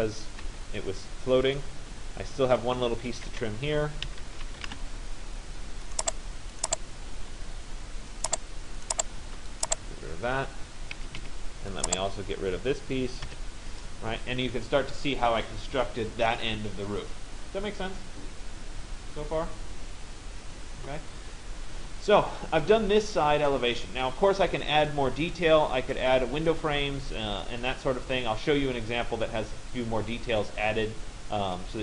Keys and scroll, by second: 0.1 Delete, 4.7 Return, 8.9 Return, 11.0 Escape.